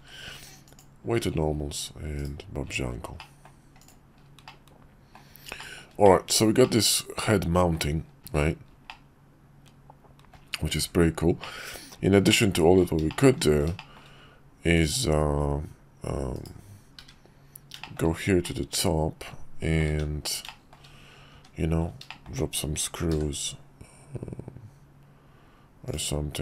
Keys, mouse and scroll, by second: 2.2 /, 3.2-3.5 middle drag, 3.8 click, 4.4-5.2 middle drag, 5.6 shift+middle drag, 6.0 middle click, 6.6-7.7 middle drag, 8.2 shift+middle click, 8.9-10.3 middle drag, 11.4-11.9 middle drag, 12.3-12.8 shift+middle drag, 13.1 shift+middle drag, 13.8 shift+middle drag, 14.7 middle click, 17.8 shift+middle drag, 18.4-19.8 middle drag, 19.9 `, 20.4 shift+middle click, 21.3 `, 22.1 shift+middle click, 23.1 d.